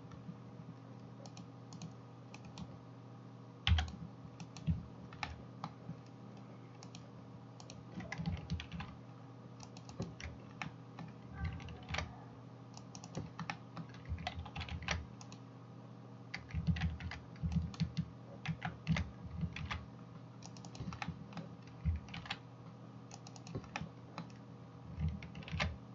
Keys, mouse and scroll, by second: 1.4-10.2 drag, 2.5 middle click, 2.5 right click, 3.8 x, 4.6 middle click, 4.6 right click, 8.7 ctrl+r, 10.2-25.9 middle drag, 14.7 ctrl+r, 18.6 ctrl+z, 19.6 ctrl+r, 22.3 ctrl+r, 25.6 ctrl+r.